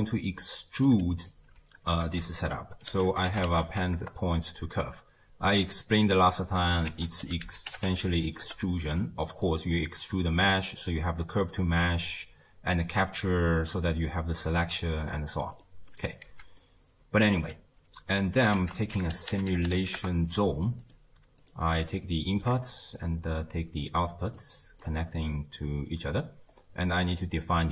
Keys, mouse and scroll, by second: 0.0-0.9 middle drag, 0.9 click, 2.1 ctrl+a, 3.2 p, 6.0-6.3 scroll up 2, 6.3 middle click, 6.9 ctrl+a, 14.0 click, 15.9 click, 16.3 x, 16.6-18.6 middle drag, 18.6 ctrl+a, 21.4 click, 22.0-23.1 alt+drag, 24.4 click, 25.3-26.6 middle drag, 26.6-26.9 scroll down 1, 26.9-27.7 middle drag.